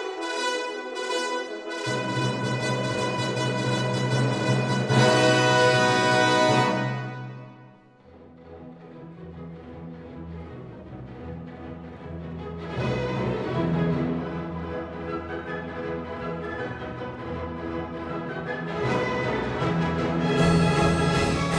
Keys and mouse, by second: 0.6 right click, 1.0 s, 3.5 click, 3.9 e, 9.1 click, 10.4 click, 11.0 KP_5, 13.2 e, 13.7 right click, 14.3 s, 17.2 click, 18.4 e, 19.1 z, 20.8 click.